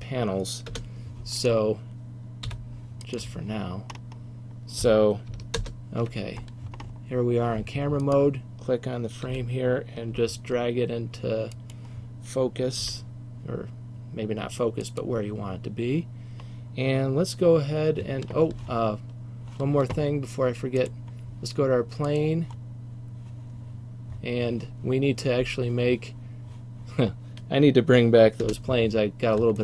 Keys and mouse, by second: 0.8 KP_0, 2.6 h, 3.3 h, 5.7 ctrl+alt+KP_0, 8.1 click, 8.8 click, 9.4 g, 12.9 g, 15.0-16.8 drag, 28.6 KP_0.